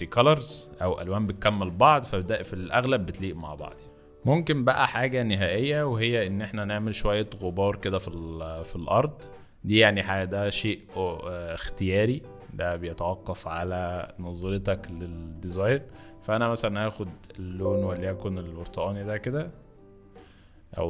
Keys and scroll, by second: 3.5 ctrl+z, 7.5 b, 17.5 alt+d.